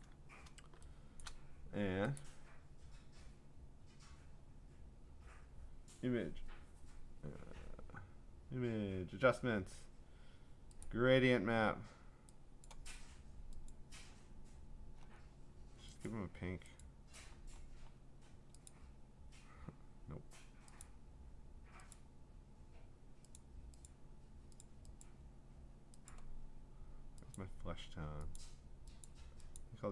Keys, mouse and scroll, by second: 0.0 click, 1.1 click, 2.2 click, 10.8 click, 12.7 click, 13.7 click, 14.7-16.1 scroll, 16.1 click, 16.8 click, 17.3-18.2 scroll, 18.7 click, 19.5-20.8 scroll, 20.8 click, 21.9 click, 23.4 click, 24.0 click, 24.6 click, 25.0 click, 26.1 click, 26.3-27.4 scroll, 27.4 click, 28.4 click, 29.1 click, 29.6 click.